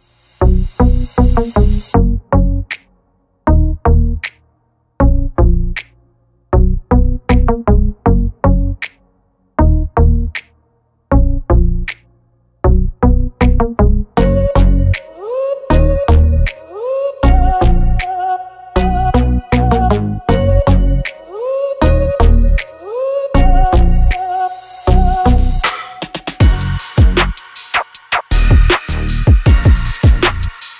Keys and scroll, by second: 11.7 space, 12.3 e, 15.5 space, 16.2 p, 17.0 space, 20.0 r, 22.8 space, 23.2 p, 26.0-27.0 typing.